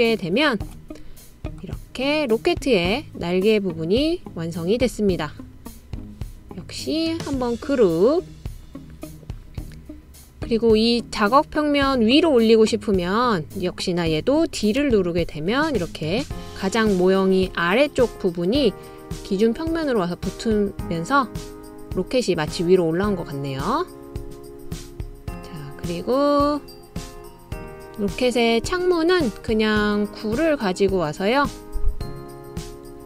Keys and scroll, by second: 16.0 d.